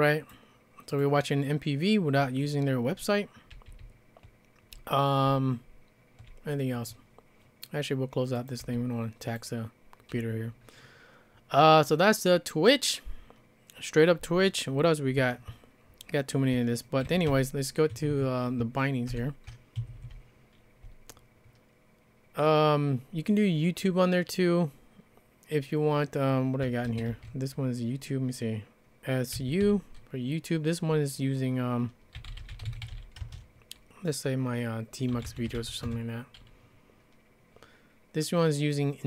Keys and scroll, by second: 3.5 j, 3.8-4.7 j, 5.3-6.2 j, 8.6 q, 16.8-17.8 typing, 17.9 Escape, 18.1 Escape, 19.1 ctrl+-, 19.8 Escape, 20.1-20.8 typing, 26.7-27.6 typing, 29.3 typing, 31.9-33.4 typing, 34.9-36.4 typing.